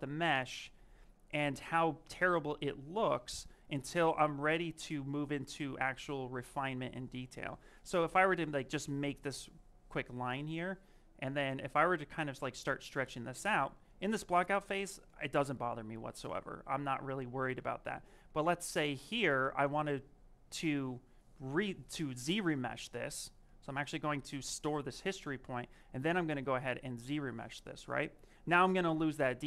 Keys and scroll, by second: 11.2 m, 15.8 ctrl+z, 16.0 ctrl+z, 16.3 ctrl+z, 17.1 ctrl+z, 17.3 ctrl+z, 17.7 ctrl+z.